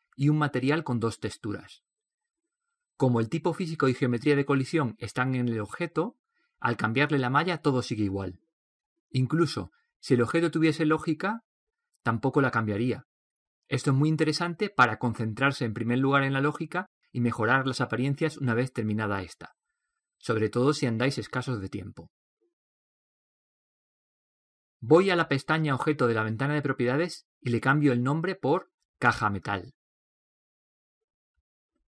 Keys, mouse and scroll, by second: 3.0-10.3 middle drag, 13.6-18.0 right drag, 18.6-20.4 drag, 21.9-30.4 right drag, 30.4 click.